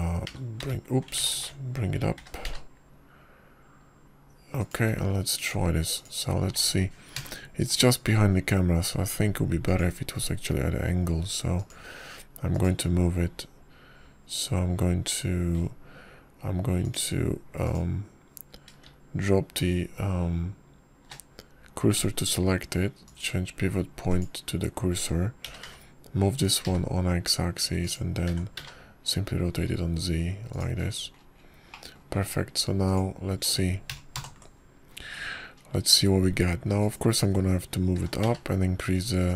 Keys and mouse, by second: 0.3 shift+middle click, 2.2 h, 2.5 g, 3.3 ctrl+z, 3.6 ctrl+z, 4.1 g, 7.8 click, 9.0 ctrl+KP_0, 11.5 click, 13.4 click, 14.4 click, 18.7 click, 19.5 click, 20.7 shift+s, 24.9-26.2 drag, 27.3 g, 30.1 r, 33.6 click, 34.7 click, 36.0 ctrl+KP_0.